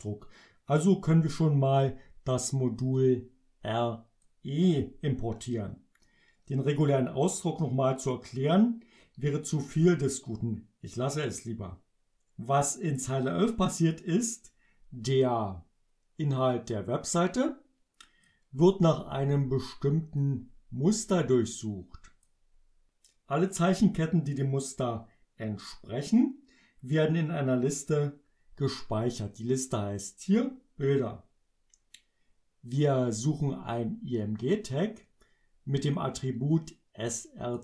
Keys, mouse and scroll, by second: 3.0-4.4 drag, 16.5-18.5 drag, 20.2-22.5 drag, 32.8 click, 33.8-35.2 drag, 36.6-37.6 drag.